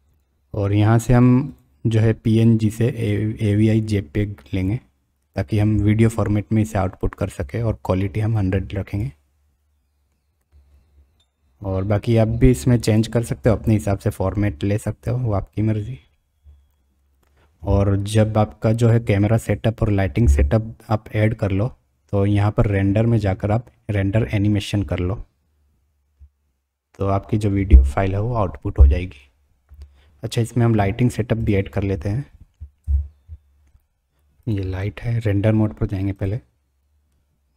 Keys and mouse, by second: 1.6-4.6 drag, 8.4 click, 13.0-15.6 drag, 19.9 middle click, 22.7-26.6 drag, 32.8 KP_7, 36.1 click.